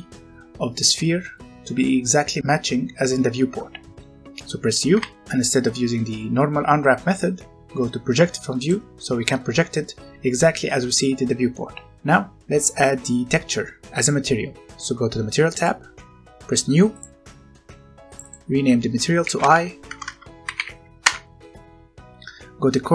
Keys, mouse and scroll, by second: 4.9 u, 8.6 click, 11.8-12.9 scroll up 1, 15.5 click, 19.2-20.5 typing, 20.9 Return.